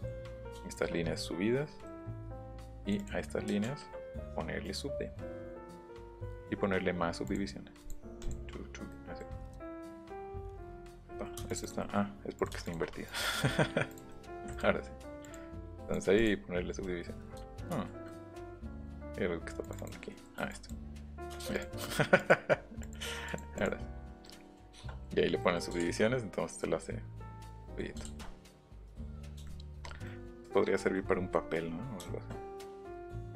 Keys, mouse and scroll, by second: 1.8 middle click, 2.4 right click, 2.8 right click, 4.6 right click, 6.2 click, 7.2 click, 7.8 click, 8.2 click, 8.9 middle click, 9.6 ctrl+z, 9.9 ctrl+z, 10.3 ctrl+z, 11.5 click, 11.7 middle click, 12.4 shift+click, 13.0 right click, 13.9 click, 14.3 Escape, 14.5 click, 15.2 click, 15.9 click, 16.8 middle click, 17.4 ctrl+z, 17.7 ctrl+z, 18.1 middle click, 18.4 ctrl+z, 19.6 click, 20.5 click, 21.4 space, 21.5 click, 22.2 click, 22.8 click, 23.3 click, 23.5 click, 24.2 middle click, 24.7 shift+middle click, 25.1 middle click, 25.2 middle click, 26.6 middle click, 27.6 middle click, 28.0 ctrl+middle click, 28.8 shift+middle click, 29.4 shift+middle click, 30.0 middle click, 30.8 middle click, 31.1 middle click, 31.4 middle click, 32.0 shift+middle click, 32.3 middle click, 33.0 middle click.